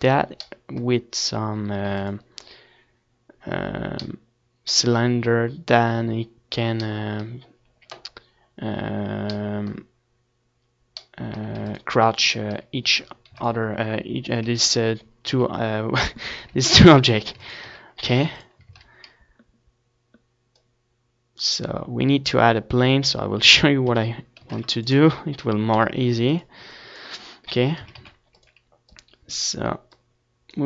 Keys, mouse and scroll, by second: 5.9 ctrl+s, 7.4 ctrl+s, 8.6 KP_1, 9.3 ctrl+KP_1, 10.5 ctrl+KP_3, 11.4 ctrl+s, 11.6 z, 12.1 a, 12.1 ctrl+s, 12.6 shift+a, 16.3 middle click, 17.2 r, 18.6-21.5 drag, 19.6 s, 21.5 s, 23.1-24.4 drag, 24.4-25.8 middle drag, 24.8 z, 27.0-28.6 drag, 28.8 KP_7, 29.0 z, 29.8-30.6 middle drag.